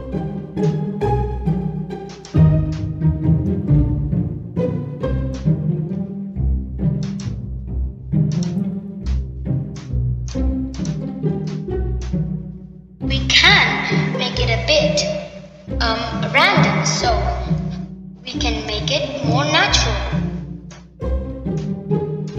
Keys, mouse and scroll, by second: 0.3 shift+click, 1.0-2.5 middle drag, 4.0 shift+click, 4.9 middle click, 6.5 click, 8.9 shift+click, 10.2 shift+click, 11.0-12.6 middle drag, 12.6 shift+click, 13.4 middle click, 16.3 middle click, 19.6 middle click, 21.7 middle click.